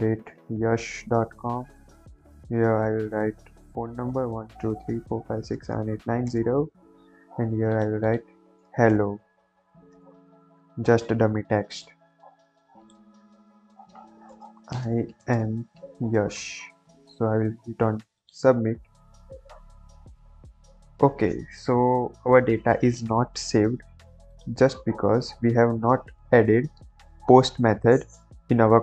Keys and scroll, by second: 26.3 ctrl+j.